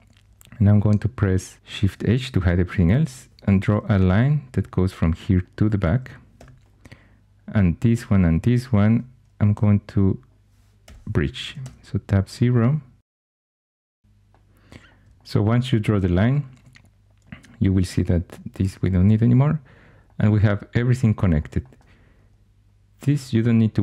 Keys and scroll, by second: 1.7 shift+h, 3.0 1, 3.6 shift+a, 6.3 2, 8.8 shift+h, 9.5 1, 10.8 l, 11.4 Tab, 11.6 Tab, 16.5 2, 18.4 x.